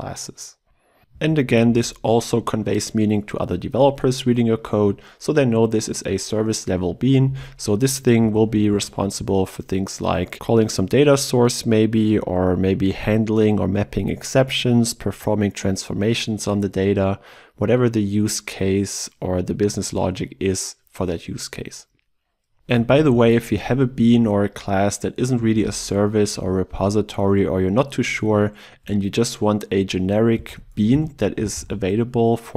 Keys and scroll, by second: 1.3 ctrl+w, 23.8 ctrl+w, 30.4 ctrl+BackSpace.